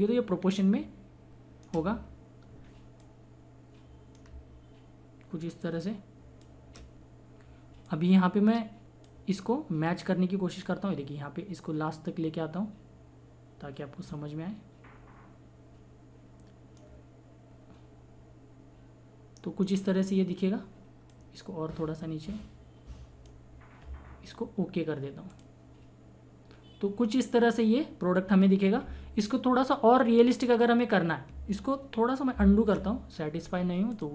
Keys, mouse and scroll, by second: 5.6-19.2 shift+drag, 21.1-25.9 drag, 31.4 click, 32.3 ctrl+z, 33.9 click.